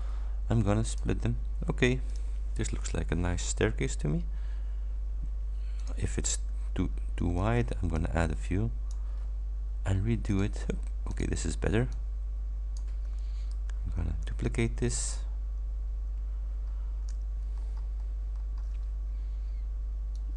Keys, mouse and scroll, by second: 1.0 click, 2.2 click, 3.5 ctrl+scroll down 2, 4.3 ctrl+scroll down 1, 5.8 click, 7.2 ctrl+d, 8.0-9.2 ctrl+drag, 10.4 click, 11.2 click, 12.0-13.0 drag, 14.3 ctrl+d, 16.2-16.7 ctrl+scroll up 4, 17.6-18.8 ctrl+shift+scroll up 7, 20.2-20.3 ctrl+drag.